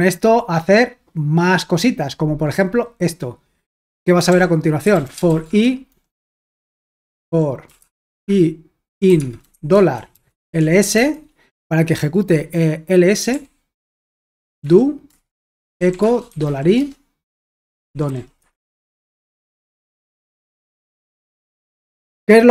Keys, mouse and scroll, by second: 4.3-11.5 typing, 13.3-22.5 typing, 14.2 Return, 20.1 super+h, 20.9 ctrl+p.